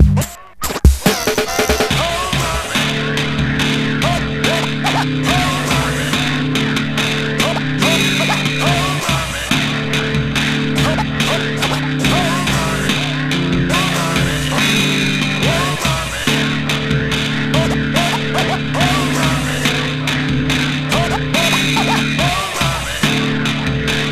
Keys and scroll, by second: 15.3-18.0 typing, 20.2-22.1 typing, 23.2-24.1 typing.